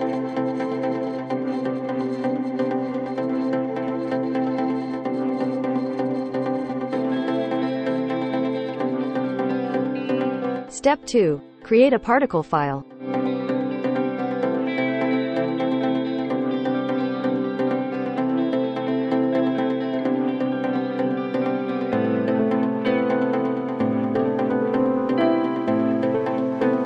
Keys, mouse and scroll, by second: 1.1 click, 4.1 click, 5.8 click, 14.1 click, 14.3 right click, 16.8 click, 17.4-20.2 typing, 21.5 click, 24.7 click, 25.3-26.8 typing.